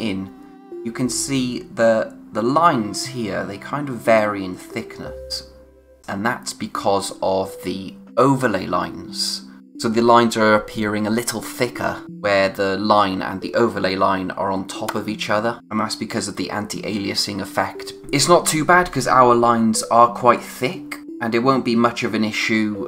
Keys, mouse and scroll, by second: 15.6-17.7 scroll up 1, 19.6-21.0 scroll down 1.